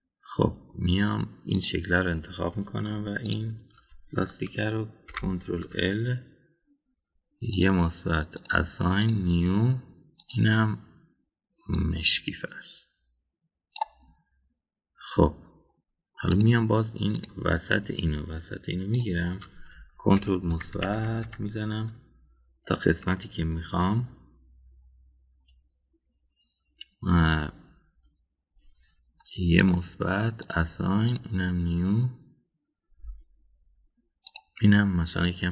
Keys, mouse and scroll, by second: 0.5-1.7 middle drag, 2.5 click, 6.1 ctrl+l, 8.6 click, 9.4 drag, 10.0 click, 11.2 click, 17.3 drag, 18.1 click, 19.9 shift+click, 21.1 ctrl+KP_Add, 21.5 ctrl+KP_Add, 21.7 ctrl+KP_Add, 22.0 ctrl+KP_Add, 22.3 ctrl+KP_Add, 30.6 click, 31.4 drag, 32.0 drag, 35.2 click.